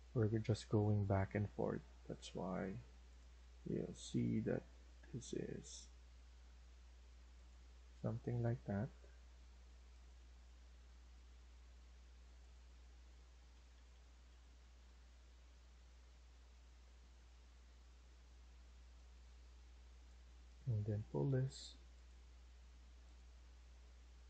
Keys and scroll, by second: 7.8 Escape, 8.4 Escape, 11.1 Escape, 13.4 Left, 13.6 Left, 14.6 Left, 16.2 Right.